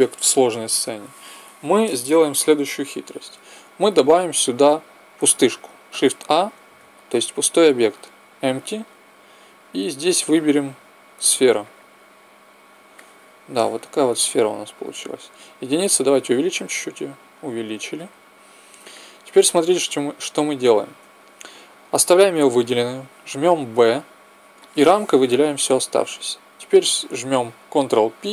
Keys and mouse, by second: 5.8 shift+a, 12.9-14.1 middle drag, 14.7 KP_1, 16.2 s, 18.8-20.0 middle drag, 20.1 middle click, 20.9 KP_1, 23.6 b, 28.1 ctrl+p.